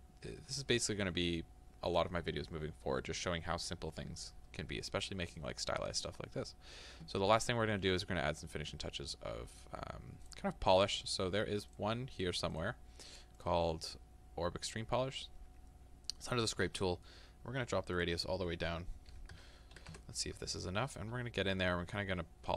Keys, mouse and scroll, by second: 13.5-16.8 drag, 16.8-21.2 middle drag, 21.2-22.5 drag, 21.2-21.6 scroll down 2, 21.6-22.4 scroll up 2, 22.4-22.5 scroll down 2.